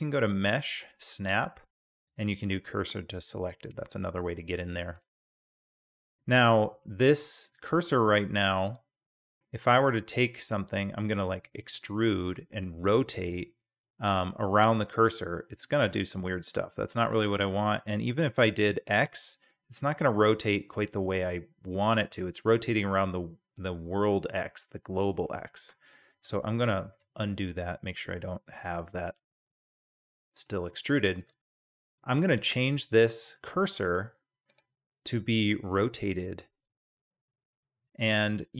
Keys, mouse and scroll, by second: 0.1-5.0 drag, 5.5-6.8 middle drag, 8.6-9.1 middle drag, 10.4-11.4 middle drag, 11.7 e, 26.7 ctrl+z, 28.0 g, 30.0-30.5 drag, 30.8-31.2 shift+middle drag, 34.5 click, 35.4 click, 37.6 click.